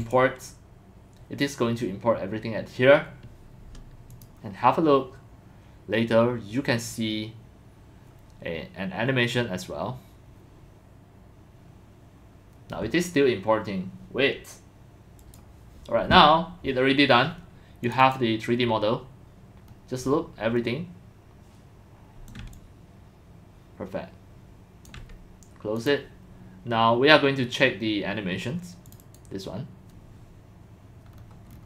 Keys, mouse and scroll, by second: 0.1-1.3 drag, 4.7 click, 15.2 click, 15.6 click, 17.8 click, 18.0 click, 19.6 scroll, 20.0 scroll down 1, 20.0 scroll, 22.3-23.3 scroll, 23.0 click, 24.1 click, 24.3 middle click, 24.9-26.8 alt+drag, 27.8-28.2 drag, 29.2 click, 29.7 click, 31.1-31.6 scroll down 5.